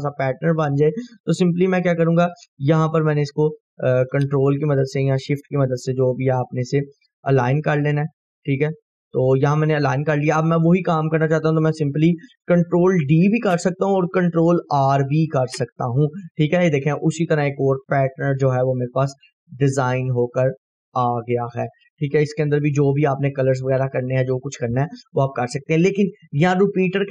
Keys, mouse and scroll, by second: 0.8-9.9 ctrl+drag, 9.6 right click, 10.3 scroll down 1, 16.3 scroll down 1, 17.3-18.2 drag, 23.4 scroll up 1, 25.3 scroll down 1, 26.2 click.